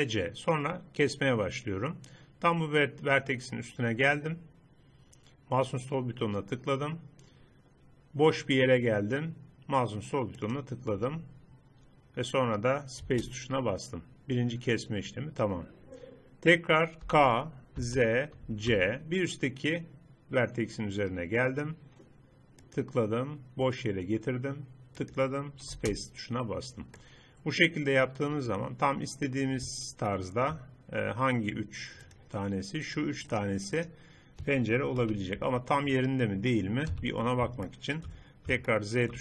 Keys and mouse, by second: 17.1 k, 26.7 middle click, 28.9-30.1 middle drag, 32.1 click, 34.1-35.1 right drag, 35.1 KP_3, 37.0 z.